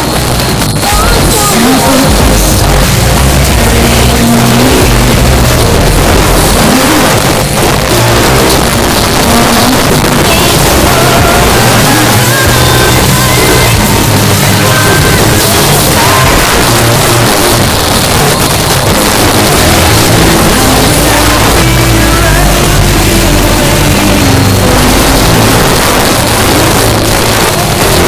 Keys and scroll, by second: 7.0 Page_Down, 16.4 Page_Down, 25.5 Page_Down, 28.0 alt+s.